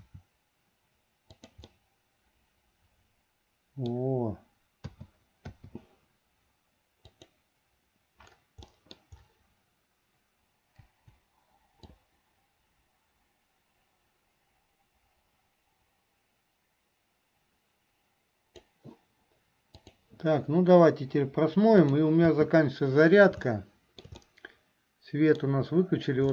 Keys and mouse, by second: 0.0 r, 1.8-4.2 middle drag, 5.2 a, 5.8 i, 7.1 click, 8.9 middle click, 11.0 Delete, 12.1-18.9 drag, 19.9 click, 21.9 click, 22.4 space, 23.7 shift+middle click, 24.3-25.6 middle drag.